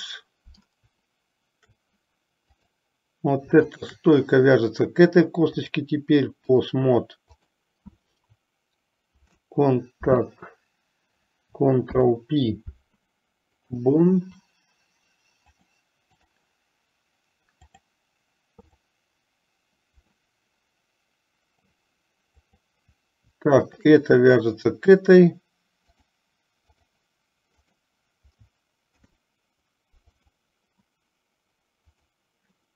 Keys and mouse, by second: 2.6 click, 3.8 shift+click, 5.7-6.8 drag, 7.6 click, 12.0 ctrl+p, 15.7 click, 17.9 click, 18.9 click, 20.3-22.0 middle drag, 22.7 click, 23.9 shift+click, 26.1 click, 27.7 click, 29.0 ctrl+p.